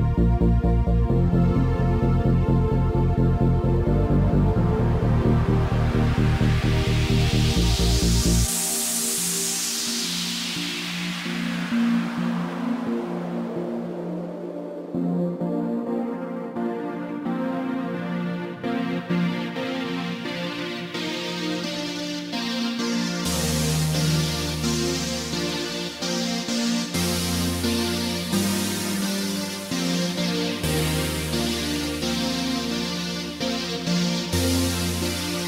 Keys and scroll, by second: 23.8 ctrl+d.